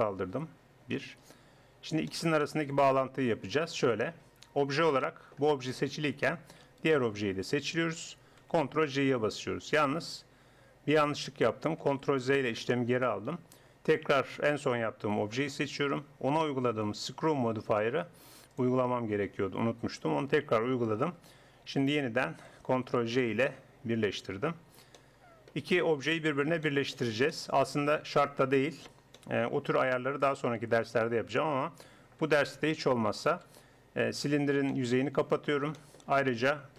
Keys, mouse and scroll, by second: 1.0 KP_1, 3.6 Tab, 4.3 Tab, 6.8-8.4 right drag, 8.5 ctrl+j, 11.8 ctrl+z, 13.9 click, 14.1 right click, 15.1 right click, 18.5-20.5 drag, 21.8-22.8 right drag, 22.8 ctrl+j, 23.9 middle click, 24.3 Tab, 29.0 middle click, 30.8 a, 31.4 a, 31.9 a, 34.4 f.